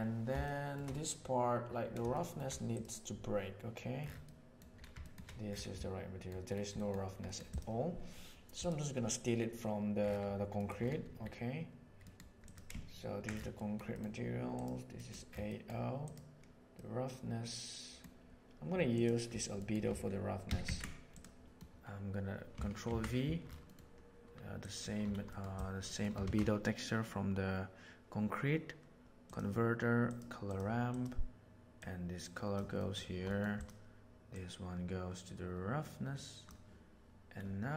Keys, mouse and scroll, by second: 0.3-0.7 shift+middle drag, 2.1 shift+middle click, 4.3 middle click, 4.9 shift+middle click, 5.8 middle click, 6.7 middle click, 7.2 middle click, 8.5 click, 11.9 middle click, 12.4 click, 13.5 middle click, 14.9 middle click, 15.5 middle click, 16.0 click, 16.7-17.9 middle drag, 18.9 click, 19.6 middle click, 20.4 ctrl+c, 20.5 ctrl+c, 21.0 click, 22.8 ctrl+v, 23.6 middle click, 24.6 click, 25.2 middle click, 25.8 middle click, 26.1 shift+a, 30.8 click, 31.7-32.5 drag, 32.8 middle click, 33.3 middle drag, 33.5 click, 34.2-36.4 drag.